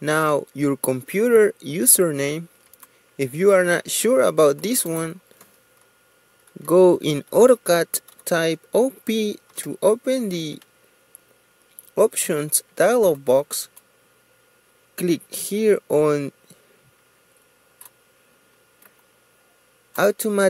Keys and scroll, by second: 6.5-7.2 typing, 8.6 Return.